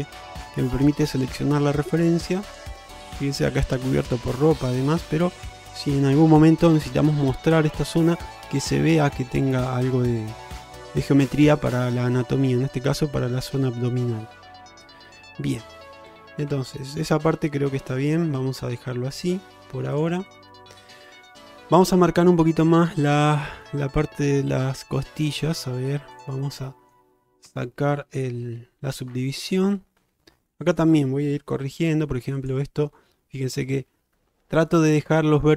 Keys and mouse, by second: 0.0 click, 1.3-2.6 drag, 16.6 ctrl+z, 19.3 click, 20.3 middle drag, 21.1 shift+middle drag, 26.2 click, 26.7-27.0 middle drag, 27.6 Tab, 28.0-29.1 middle drag, 29.4 shift+middle click, 31.9 g.